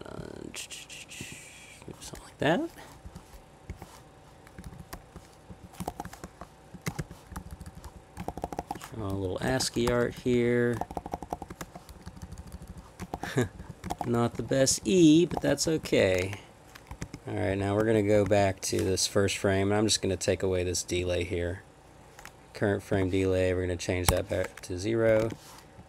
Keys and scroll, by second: 3.0 Left, 3.7 \, 4.6 Up, 4.6 Left, 5.0-6.9 typing, 5.5 Right, 7.3 Up, 8.3 shift+-, 9.0 Down, 9.8 Page_Down, 10.2 Left, 10.3 Left, 10.8-11.6 typing, 12.1 Left, 12.2-12.5 Left, 12.7 Left, 13.1 shift+-, 13.4 Left, 13.6 Left, 13.9 shift+-, 14.3 Right, 14.5 Up, 14.7-15.3 Right, 15.4 shift+-, 15.7 Down, 15.8 Down, 16.0 Down, 16.9 Escape, 17.0 j, 17.5 Escape, 17.8 j, 18.2 Escape, 22.9 0, 24.1 Return, 25.1 Escape, 25.2 p, 25.8 Down.